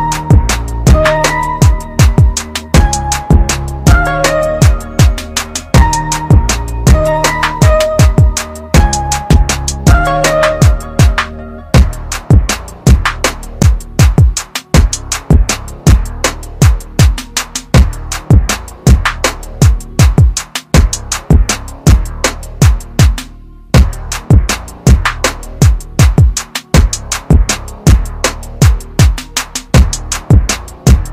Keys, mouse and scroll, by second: 2.3 click, 11.1 click, 13.5 ctrl+click, 17.1-18.0 scroll up 1, 18.0 click, 18.5 scroll up 1, 19.3-20.2 scroll down 1, 21.1 right click, 24.6 Delete, 26.2 Return, 27.5 right click.